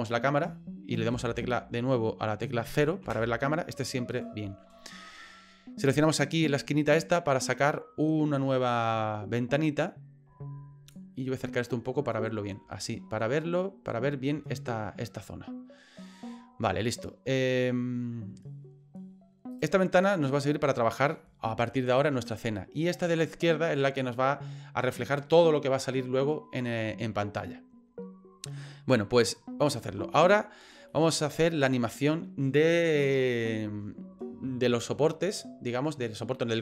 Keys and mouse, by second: 1.1 n, 3.0 KP_0, 7.0-11.0 drag, 12.8-13.9 ctrl+middle drag, 20.3 middle click, 31.0 middle click.